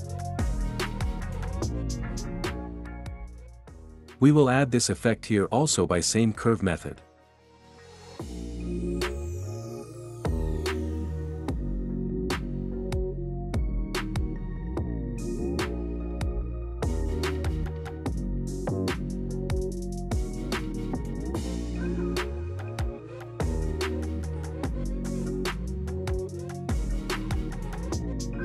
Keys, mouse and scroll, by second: 1.7 space, 3.2 click, 3.9 ctrl+b, 5.0-6.0 drag, 8.3 ctrl+b, 8.8 click, 12.0-13.0 drag, 14.6-15.6 drag, 16.2 click, 17.5 click, 21.3 click, 22.3 space.